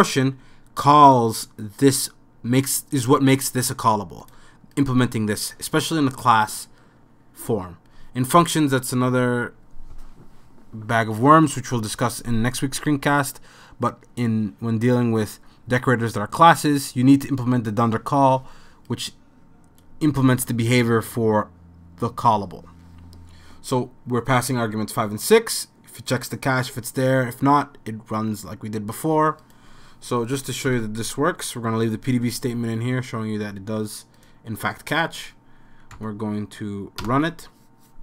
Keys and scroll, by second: 30.7 super+s, 36.0 Up, 37.0 Return.